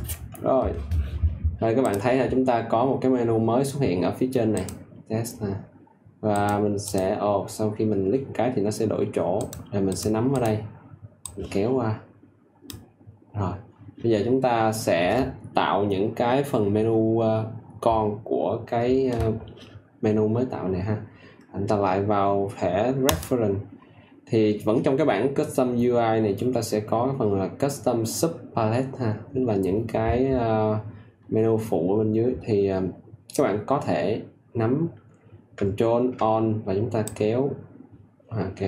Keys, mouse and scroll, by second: 1.8-12.9 drag, 15.1 click, 37.0 ctrl+alt+click.